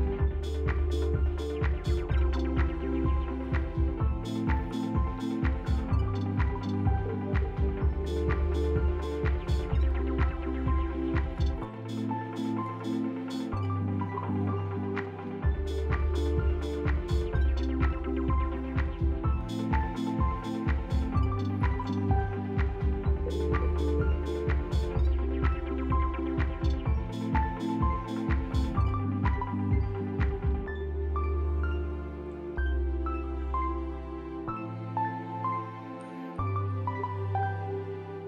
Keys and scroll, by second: 7.0 shift+s, 8.0 s, 15.8 p.